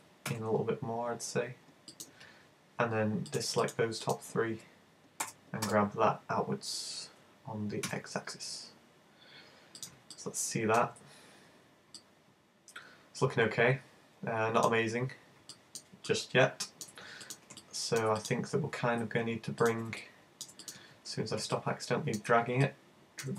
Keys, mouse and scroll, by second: 2.1 click, 3.3 shift+right click, 3.6 shift+right click, 4.1 shift+right click, 5.3 g, 9.9 click, 10.2 middle click, 11.1-11.5 scroll down 3, 11.7 scroll down 1, 12.0 middle click, 14.9-15.6 scroll up 5, 15.6 shift+middle click, 16.1 middle click, 17.3 right click, 18.6 super+z, 19.6 shift+right click, 21.0 super+z, 21.6 middle click, 22.7 middle click.